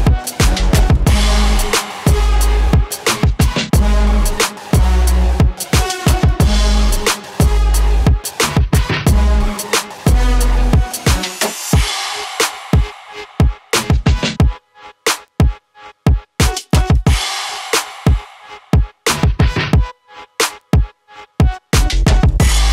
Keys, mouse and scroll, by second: 16.3 click, 21.2 click.